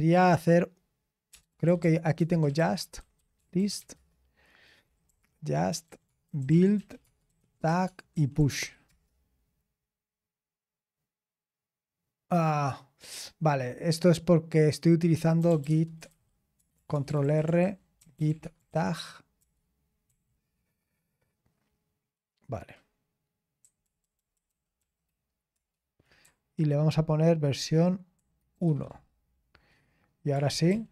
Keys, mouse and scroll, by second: 3.7-9.9 typing, 18.3-20.1 typing, 26.9-27.8 Left, 28.1 Right, 28.6 BackSpace, 28.6 1, 28.9 Return, 30.5 ctrl+p.